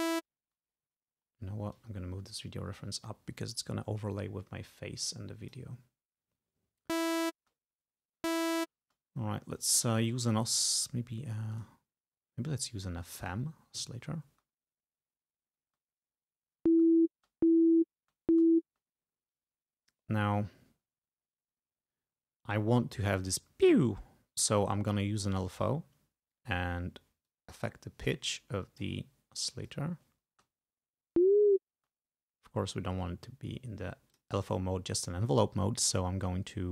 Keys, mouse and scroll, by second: 1.8-5.8 drag, 7.0 space, 8.3 space, 11.6 click, 13.2 click, 14.3 space, 15.7 space, 16.8 space, 25.4 click, 27.4-29.1 drag, 29.7 click, 30.3 space, 31.3 space, 34.2 click.